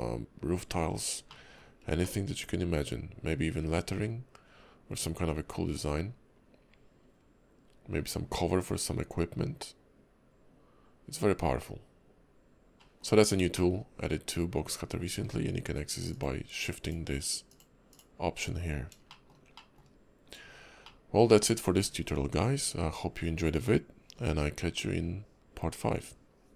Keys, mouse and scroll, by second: 1.3 shift+middle click, 2.0 middle click, 12.7 click, 12.9 middle click, 13.2-13.5 scroll up 2, 13.5 middle click, 16.1 click, 16.8 click, 17.5 click, 17.9 click, 18.6-19.0 scroll down 2, 19.1 shift+middle click, 19.5 middle click, 20.5 scroll down 2, 20.8 middle click.